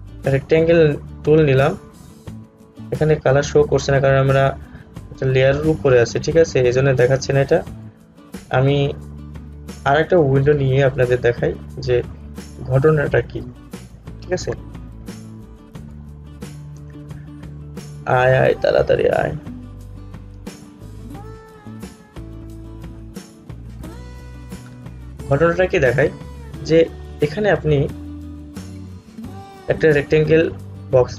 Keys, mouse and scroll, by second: 10.2 right click, 11.3 click, 22.5 click, 28.3-31.1 drag.